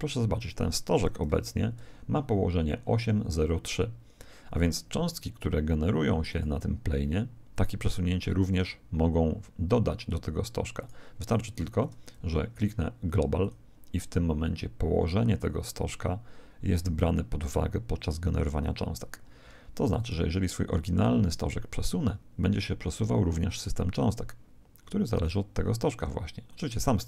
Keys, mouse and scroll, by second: 0.3 right click, 1.3 n, 1.9-3.9 middle drag, 6.3 right click, 10.7-12.9 right drag, 13.0 right click, 13.4 click, 19.9 right click, 21.9 g.